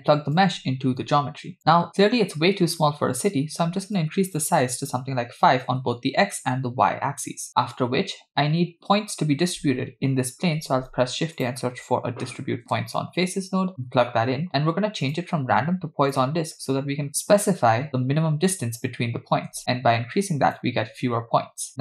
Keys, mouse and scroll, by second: 0.4-1.6 drag, 3.1-3.6 scroll up 2, 4.0-5.8 shift+drag, 10.6 shift+a, 15.1-16.3 drag, 19.6-20.7 shift+drag.